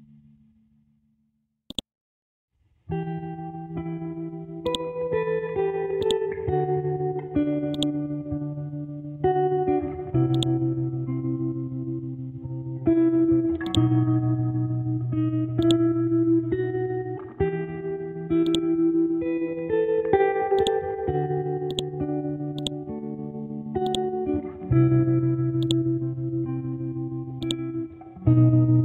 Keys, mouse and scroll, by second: 4.7-10.3 drag, 13.7-21.7 drag, 22.1 c, 22.6-25.6 drag, 26.0 scroll down 1, 26.8 scroll up 1, 27.4 click.